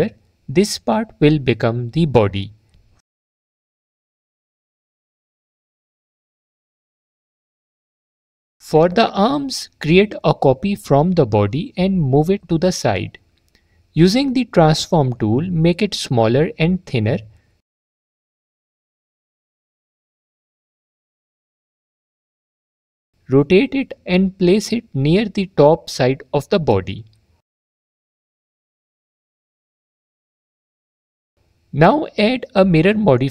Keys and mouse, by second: 1.9 click, 4.3 middle click, 6.1 click, 9.7 shift+d, 12.3 click, 13.5 s, 18.0 click, 19.9 click, 22.5 click, 24.1 click, 26.2 click, 27.9 click, 30.8 middle click, 32.8-33.3 drag.